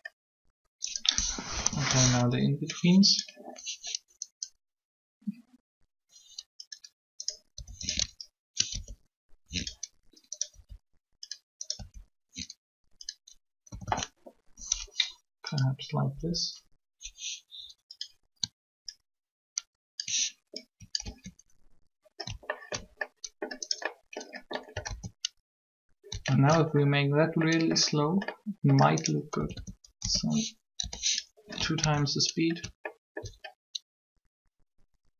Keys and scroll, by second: 1.5 3, 7.5 r, 8.7 ctrl+r, 10.5 r, 11.7 r, 13.7 a, 13.8 a, 16.1 Up, 21.0 ctrl+alt+a, 24.8 alt+a, 29.4 a, 29.4 a, 30.0 s, 30.6 2, 31.8 alt+a.